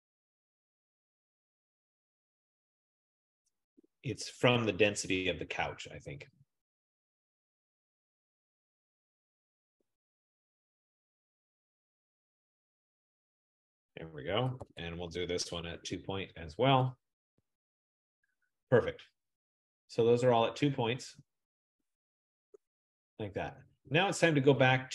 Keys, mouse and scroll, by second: 14.8-16.2 typing, 17.5 Tab, 22.8 F15.